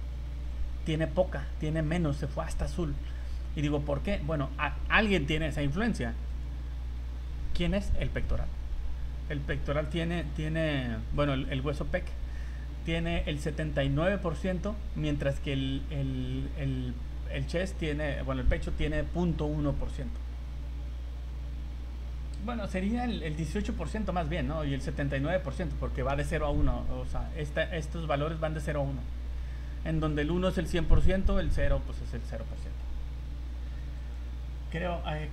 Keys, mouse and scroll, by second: 0.3 middle click, 1.4 scroll up 2, 2.3 scroll down 2, 6.4 right click, 9.1 scroll up 1, 10.2 v, 11.2 right click.